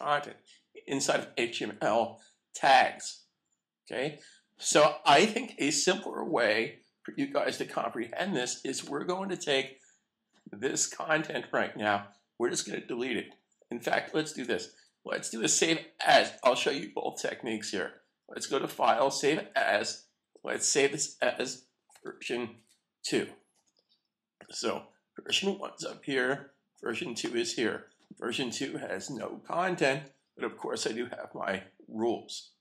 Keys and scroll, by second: 7.1 super+=, 11.6 super+a, 14.7 super+s, 19.2 shift+super+s, 21.0 Right, 23.5 Return, 29.0 super+a.